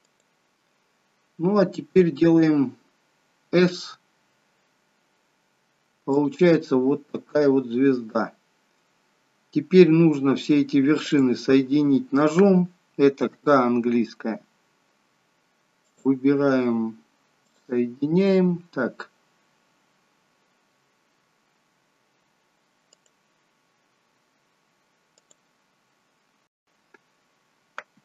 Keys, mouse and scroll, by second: 0.1 shift+click, 3.8 s, 9.8 scroll up 1, 10.2 scroll down 1, 11.2 click, 13.5 k, 19.1-20.0 scroll up 5, 26.1-26.5 scroll down 3.